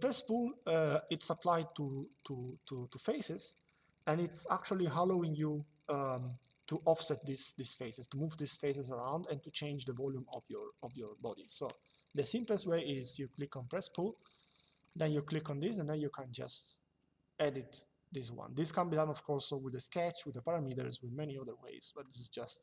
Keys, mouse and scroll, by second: 13.0 click, 14.5 click.